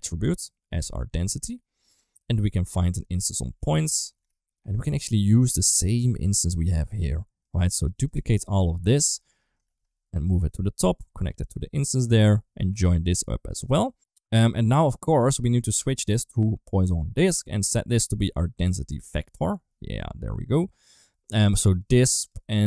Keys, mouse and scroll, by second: 0.4-0.9 drag, 1.6 middle click, 2.4-5.0 drag, 5.4 middle click, 6.7 middle click, 7.2 click, 7.6 shift+click, 7.8 shift+click, 8.2 shift+click, 8.6 shift+click, 9.0 middle click, 9.4 shift+d, 10.7 click, 11.8 middle click, 12.7-13.7 drag, 14.9 middle click, 15.5 click, 15.9-16.7 drag, 17.7-18.6 drag, 21.2 click, 22.2 click.